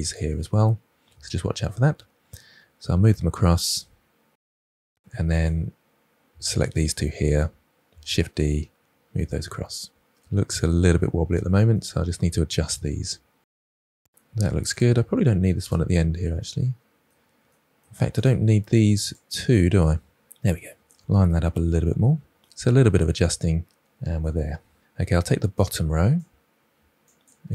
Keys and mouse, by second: 1.1 KP_1, 2.7 g, 5.2 click, 6.1 shift+click, 7.3 shift+d, 9.1 click, 11.6 click, 11.7 g, 12.2 click, 14.5 click, 15.1 Delete, 17.5 shift+click, 18.4 Delete, 19.9 middle click, 20.6 middle click, 21.2 g, 22.4-23.4 middle drag.